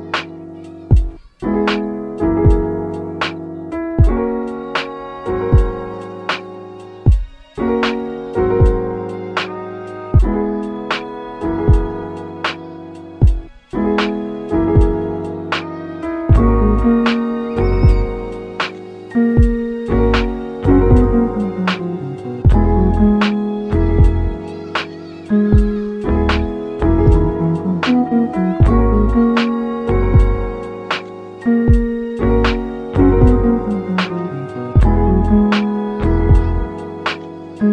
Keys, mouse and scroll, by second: 1.3-1.7 scroll down 2, 1.7 middle click, 2.2 KP_7, 5.0 shift+click, 5.1 shift+click, 5.6 shift+click, 5.7 shift+click, 6.3 shift+click, 6.7 s, 7.1 y, 8.9 click, 10.3 s, 13.4 right click, 13.8 s, 14.4 click, 16.8 g, 17.2 click, 17.7 double click, 17.8 click, 18.1 r, 18.5 click, 18.7 g, 19.1 click, 19.8 click, 20.0 r, 20.4 click, 20.5 g, 20.9 click, 21.7 click, 21.8 g, 22.1 click, 22.3 r, 23.4 click, 23.7 double click, 23.8 click, 23.9 g, 24.2 click, 24.5 r, 27.1 click, 27.9 click, 28.4 click, 28.5 r, 29.0 click, 29.7 click, 29.8 g, 30.9 shift+click, 31.0 shift+click, 31.6 shift+click, 32.2 shift+click, 32.5 shift+d, 33.1 click, 33.3 r, 34.8 click, 35.1 g, 35.6 click, 36.1 scroll down 1, 36.4-37.7 middle drag.